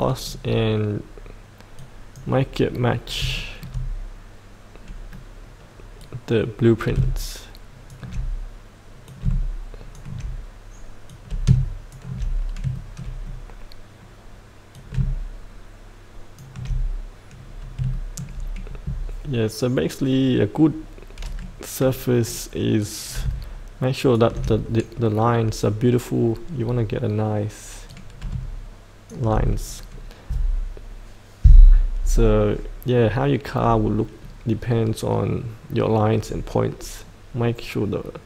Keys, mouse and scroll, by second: 0.4-1.8 scroll up 1, 1.8 click, 2.9 scroll down 1, 3.4 shift+middle click, 6.0 click, 6.3-8.2 drag, 9.3-12.3 drag, 12.5 scroll up 1, 12.7 shift+middle click, 14.8 click, 15.3 click, 17.5 scroll up 1, 17.9 shift+middle click, 22.9 click, 25.3-26.5 scroll down 1, 27.9 click, 29.5-33.4 scroll up 1.